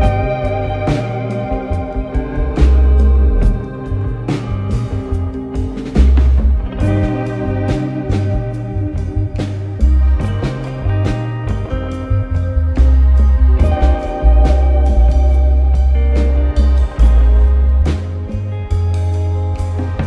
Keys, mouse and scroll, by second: 3.0 click, 3.6-4.5 scroll down 1, 4.5 Tab, 5.6 click, 6.3 click, 6.7-7.6 scroll down 1, 7.6 click, 9.5 KP_1, 10.3 click, 10.7-11.7 scroll up 1, 11.7-13.4 drag, 13.4 shift+a, 15.8 s, 18.1 KP_7.